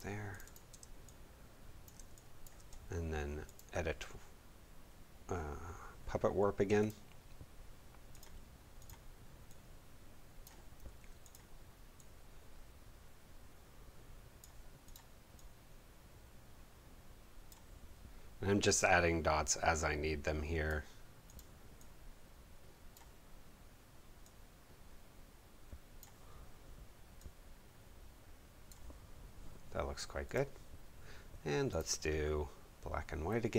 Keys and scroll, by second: 0.7 space.